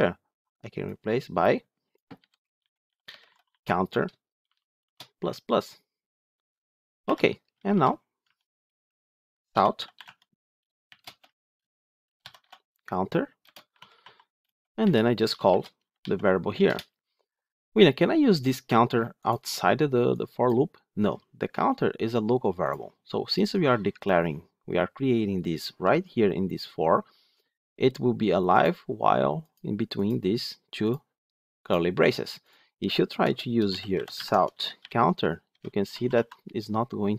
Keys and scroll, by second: 6.9 Delete, 8.1 Tab, 9.9 Tab, 16.6 Return, 34.1 Tab.